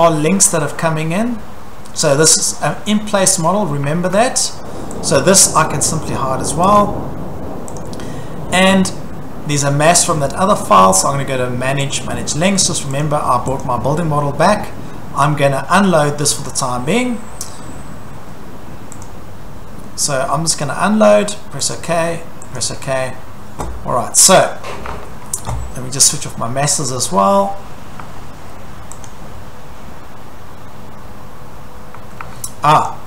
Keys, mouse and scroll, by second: 0.0-1.1 scroll, 1.3-2.2 scroll, 3.9 Escape, 4.1-4.4 scroll, 4.1 Escape, 5.1 click, 6.8 click, 7.8 click, 8.5 scroll, 8.7 Escape, 11.9 click, 13.1 click, 13.6 click, 16.5 click, 20.6 click, 21.7 click, 22.6 click, 24.5 click, 24.9 Escape, 26.8 click, 28.0 Escape, 28.3 Escape, 29.1 click, 31.5-31.9 scroll, 32.0 Escape, 32.2 Escape, 32.9 click.